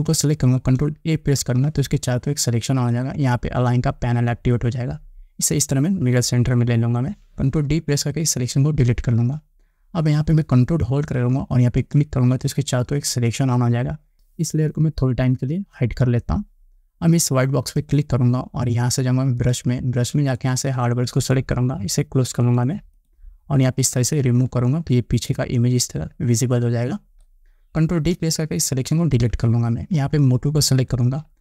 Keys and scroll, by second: 1.6 ctrl+a, 8.9 ctrl+d, 29.2 ctrl+d.